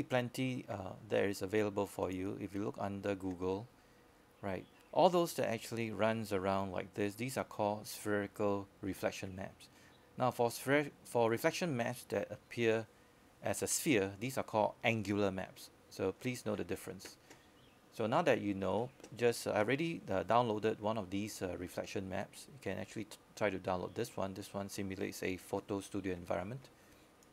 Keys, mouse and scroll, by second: 3.1 click, 10.5-13.0 scroll down 1, 17.5-18.4 scroll up 1.